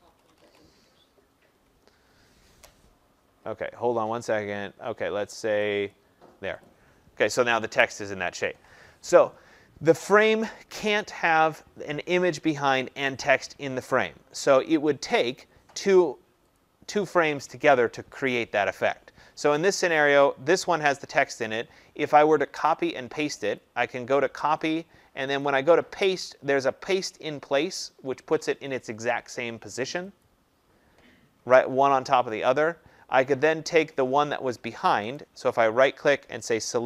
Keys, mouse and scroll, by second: 0.0-0.4 typing, 5.8 click, 6.6 click, 15.4 click, 16.5 click, 23.5 click, 24.6 click, 25.4 click, 30.2 click, 35.1 right click.